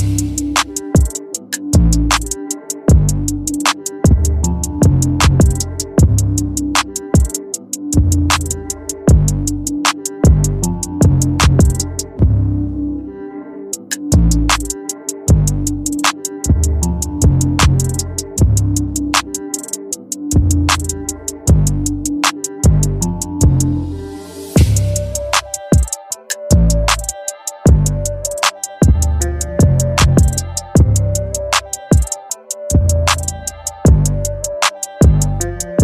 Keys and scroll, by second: 19.7 Return, 23.9 ctrl+t, 32.3 Return.